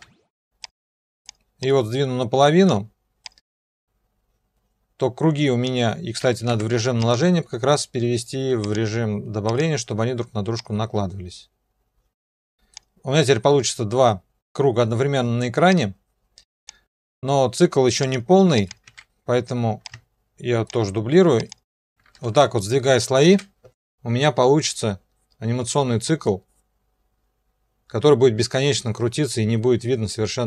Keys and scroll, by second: 0.0 ctrl+d, 6.5 F4, 18.9 ctrl+d, 22.3 ctrl+alt+b, 23.3 0.